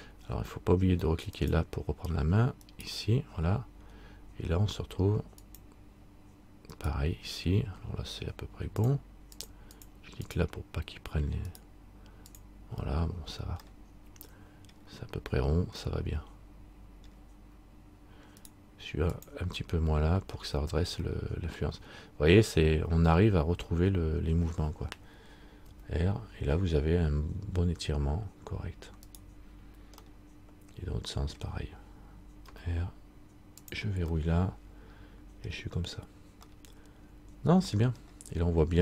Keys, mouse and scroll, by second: 1.5 right click, 1.5 click, 2.8 right click, 5.6 click, 6.9 right click, 9.0 click, 11.7 click, 11.7 right click, 12.5 click, 13.9 middle click, 16.0 middle click, 18.6 right click, 19.3 click, 20.6-21.2 scroll down 1, 21.3 middle click, 30.2 middle click, 32.6 r, 34.4 middle click, 35.9-36.6 scroll up 3, 36.7 middle click, 38.2-38.8 scroll down 1.